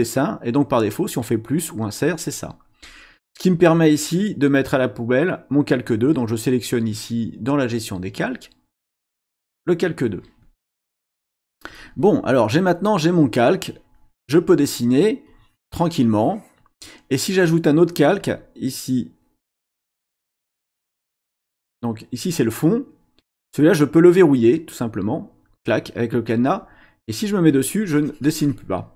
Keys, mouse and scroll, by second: 2.8 click, 9.4 click, 15.3-16.8 drag, 18.2 click, 22.2 click, 25.5 click, 27.2 click, 27.8-28.8 drag.